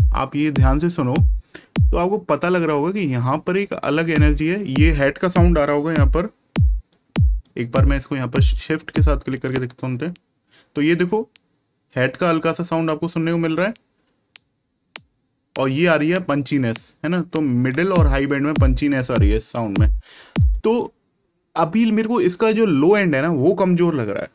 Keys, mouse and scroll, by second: 6.9 click, 9.5 shift+click, 20.3 click.